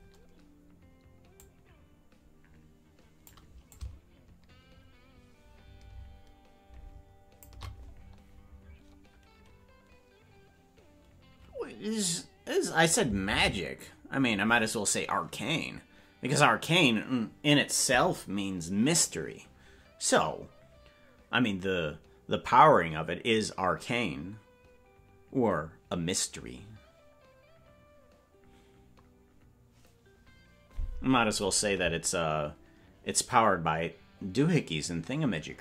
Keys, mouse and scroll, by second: 1.4-3.3 drag, 3.7-7.5 drag.